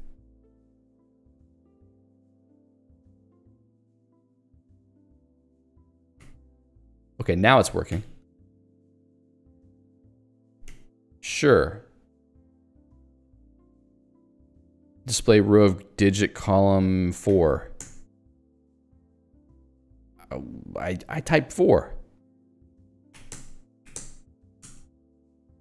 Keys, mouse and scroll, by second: 6.3 ], 7.9 [, 13.1 @, 17.3 4, 17.8 Return, 23.1 4, 23.3 Return, 23.9 3, 24.0 Return, 24.5 2, 24.7 Return.